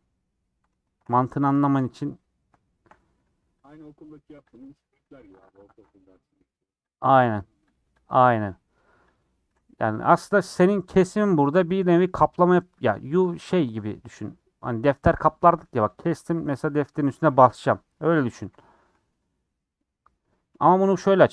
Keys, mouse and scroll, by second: 0.3 scroll up 2, 1.3 scroll down 1, 1.5 shift+middle click, 1.8 scroll down 1, 2.4 middle click, 3.2 3, 3.6 click, 4.5 click, 5.1 l, 7.3 click, 7.7 click, 8.3 click, 9.1 click, 18.4 l.